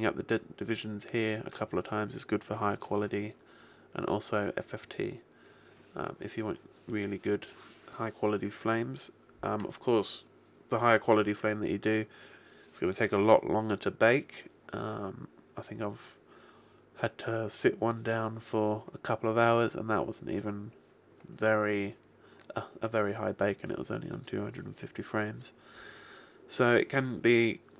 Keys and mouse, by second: 3.9 click.